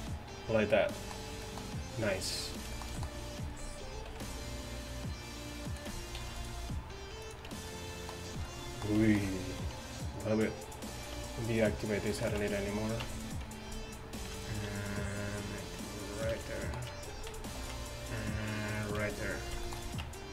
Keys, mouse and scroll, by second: 4.2 ctrl+r, 6.2 ctrl+r, 7.6 Tab, 8.4 a, 9.9 Tab, 12.5 Tab, 13.1 Tab, 14.2 ctrl+r, 16.5 Tab, 17.0 Tab, 17.7 ctrl+r, 19.1 Tab, 20.1 Tab.